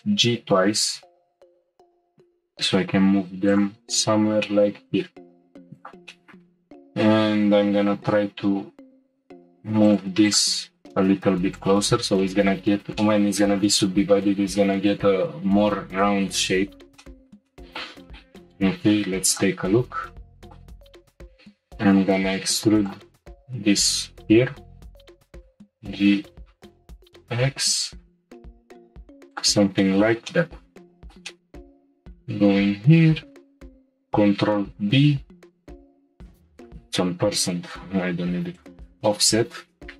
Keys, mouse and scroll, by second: 0.2 g, 4.4-5.8 middle drag, 5.8 click, 6.1 middle click, 6.2-7.8 shift+middle drag, 7.8 g, 10.2 click, 10.5 g, 11.9-12.2 scroll down 1, 12.2 shift+middle click, 12.6-13.0 scroll down 1, 13.0-16.9 shift+middle drag, 17.0 shift+middle click, 17.6-19.3 middle drag, 19.3 click, 20.1-20.8 shift+middle drag, 20.8 middle click, 21.0 e, 23.8 click, 25.3 g, 29.8 shift+middle click, 30.4 middle click, 31.7 alt+click, 33.1 ctrl+b, 36.6-39.6 drag.